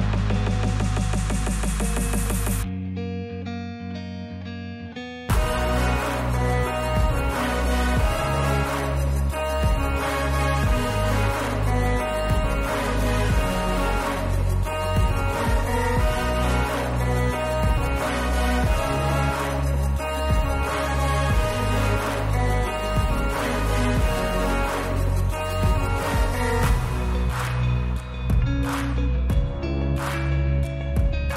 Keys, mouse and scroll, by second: 0.1 click, 1.9 click, 2.2 s, 4.2 click, 4.7 click, 5.0 s, 7.6 click, 8.0 click, 8.3 s, 9.6 click, 9.9 Tab, 11.1 click, 11.9 click, 12.7 click, 13.5 w, 14.2 middle click, 15.7 click, 16.9 click, 17.2 Tab, 17.8 Tab, 18.2 click, 18.5 Tab, 19.5 Tab, 20.0 click, 20.7 Tab, 21.6 click, 22.0 right click, 23.7 ctrl+z, 23.9 ctrl+z, 24.1 ctrl+z, 24.4 ctrl+z, 24.6 ctrl+z, 24.8 ctrl+z, 25.0 ctrl+z, 25.3 ctrl+z, 25.8 ctrl+z, 26.3 ctrl+z, 27.0 click, 27.3 Tab, 28.5 click, 29.7 click, 30.6 shift+middle click, 31.1 shift+middle click.